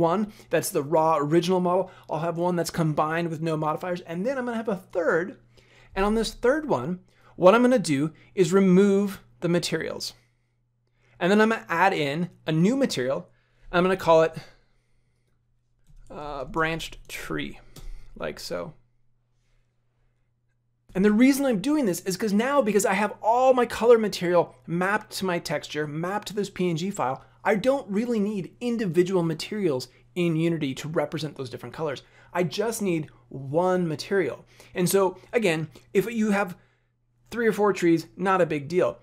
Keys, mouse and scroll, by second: 7.1 click, 8.8 click, 9.5 click, 11.4 click, 12.5 click, 17.2 e.